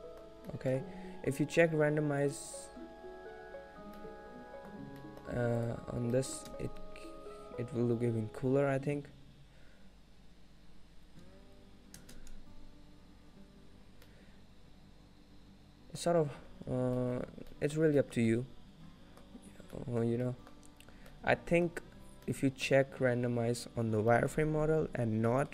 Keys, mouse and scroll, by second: 0.1 middle click, 0.1 scroll up 1, 0.4 scroll down 2, 0.9 middle click, 1.2 scroll down 1, 3.2 click, 4.2 middle click, 5.1 middle click, 5.7 click, 6.4 middle click, 6.5 space, 13.8 space, 14.1 middle click, 17.7 middle click, 17.7-18.1 scroll down 2, 18.1 shift+middle click, 18.3 scroll up 1, 18.5 middle click, 19.6-20.4 scroll up 3, 20.0 middle click, 20.4 middle click, 20.4 scroll down 2, 21.1 scroll up 1, 21.7 middle click, 22.4 middle click, 24.1 scroll down 1, 24.3 middle click, 25.4 middle click.